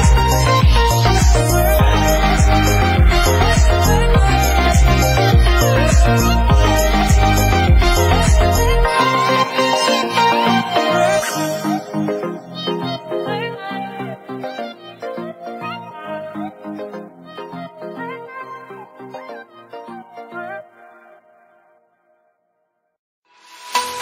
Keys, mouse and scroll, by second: 0.5 scroll up 2, 0.8 shift+middle click, 1.0 scroll down 4, 1.1-2.3 middle drag, 2.9 KP_1, 3.4-4.6 shift+middle drag, 6.4 scroll up 2, 6.7-7.5 scroll down 2, 7.5 click, 7.8 shift+middle click, 8.3 KP_1, 8.6 scroll down 4, 8.7 scroll up 1, 9.0 shift+middle click, 9.3 scroll up 1, 9.6 Tab, 10.0 alt+a, 10.3-10.8 shift+middle drag, 10.8 click, 11.9 click, 13.0 scroll up 5, 13.4-14.6 drag, 14.6 alt+a, 14.8 scroll down 1, 14.9 shift+middle drag, 15.0 scroll up 1, 15.2 click, 16.1 click, 16.4 shift+middle click, 16.9 click, 17.7 click, 17.9 alt+a, 18.1 shift+middle click, 18.5 click, 19.4 click, 20.2 alt+a, 20.4-20.8 scroll up 1, 20.8 click, 20.9-21.2 middle drag, 21.2 Tab, 21.4 shift+middle click, 21.5-21.8 scroll up 1, 21.8 click, 22.2 Delete, 22.5 scroll down 5, 22.6 middle click, 23.1 KP_1, 23.6 Tab, 23.7 alt+a, 23.8 shift+middle click.